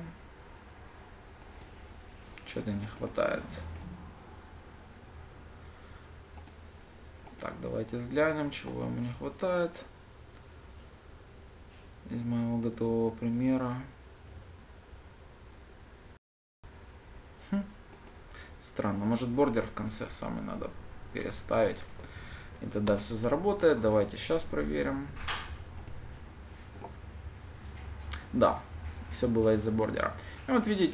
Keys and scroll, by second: 20.7 ctrl+shift+Down, 26.5 ctrl+shift+F10.